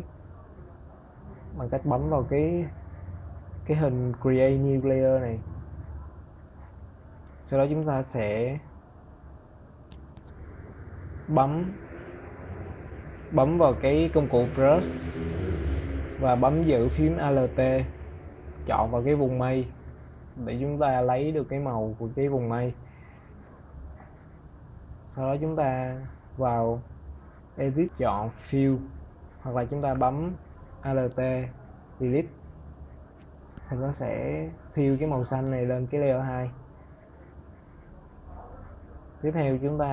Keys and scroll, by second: 30.8 alt+Delete.